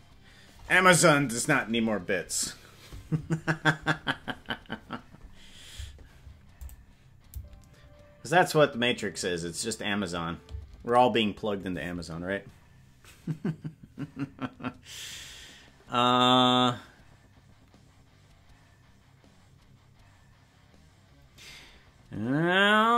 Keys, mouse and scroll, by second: 6.6 click, 10.5 space.